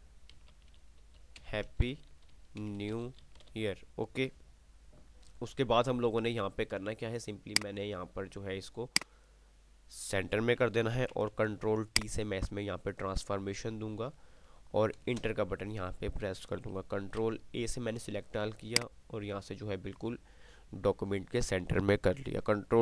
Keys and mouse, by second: 0.4-4.1 typing, 7.9 click, 11.3 ctrl+t, 12.3-14.3 alt+shift+drag, 17.6 ctrl+a, 18.9 click.